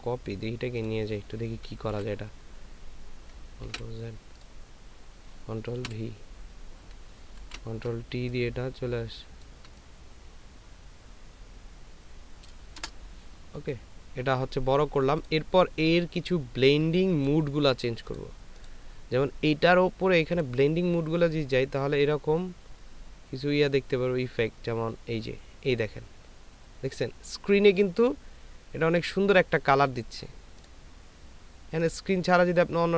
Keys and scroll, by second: 3.7 ctrl+z, 5.8 ctrl+v, 7.4 ctrl+t, 8.1 ctrl+alt+t.